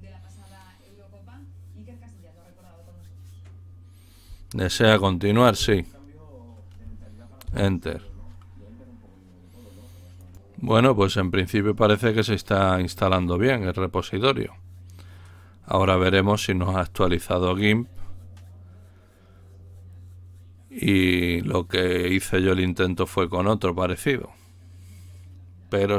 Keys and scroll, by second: 5.5 s.